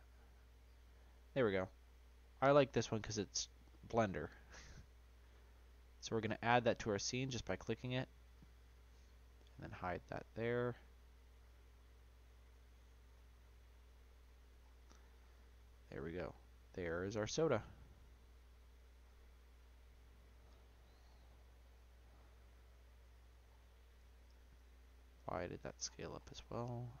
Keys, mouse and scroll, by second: 6.2-8.3 middle drag, 8.3 click, 9.5 click, 10.3-12.7 middle drag, 12.7 click, 13.4-14.2 middle drag, 14.2-14.6 scroll down 1, 14.6-15.8 scroll up 7, 15.8 click, 17.6 s, 19.0-20.0 scroll down 10, 20.1 click, 21.0-21.3 scroll down 5, 21.3-22.9 middle drag, 22.9 Delete, 23.4-24.4 scroll up 2, 24.4 ctrl+z, 24.7 ctrl+z, 25.2 ctrl+z, 25.8-27.0 scroll up 15.